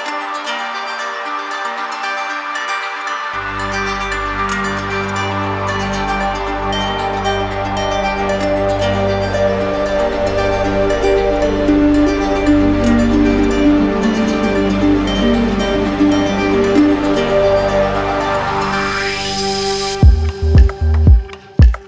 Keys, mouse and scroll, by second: 1.8 click, 3.7 click, 5.1 click, 7.6 shift+click, 8.5 click, 9.5 click, 10.1 click, 11.1 click, 11.9 alt+click, 13.5 alt+click, 15.2 alt+click, 15.8 click, 18.5 click, 20.0 click, 21.3 click.